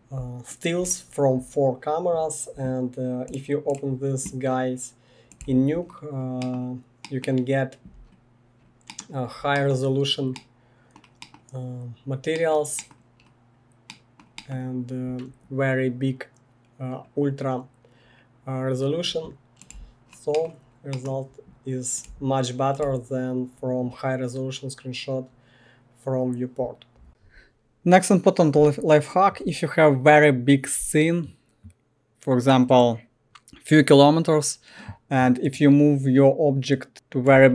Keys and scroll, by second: 5.5 1, 19.8 1, 22.2 1, 22.9 1, 36.9 f.